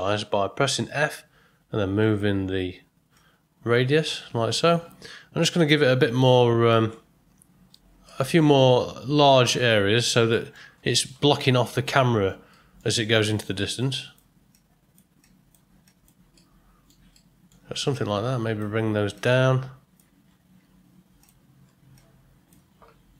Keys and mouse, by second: 3.1-4.5 drag, 5.5 click, 6.7-7.7 drag, 8.0 middle click, 9.2 click, 10.3 middle click, 11.9 ctrl+middle click, 12.5 middle click, 13.3 click, 14.5 click, 15.2 click, 15.8 click, 16.3 middle click, 17.1 ctrl+middle click, 17.9 click, 19.1 click, 20.5 f.